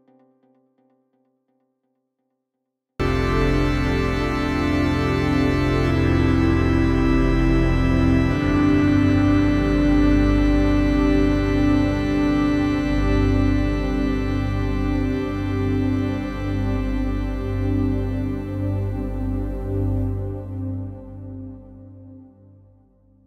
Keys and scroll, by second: 0.6 ctrl+z, 1.0 Delete, 1.3 F3, 3.3 F3, 3.5 Escape, 7.3 shift+F2, 7.5 Escape, 13.2 F3, 13.3 Escape, 16.6 Caps_Lock, 17.0-18.4 typing.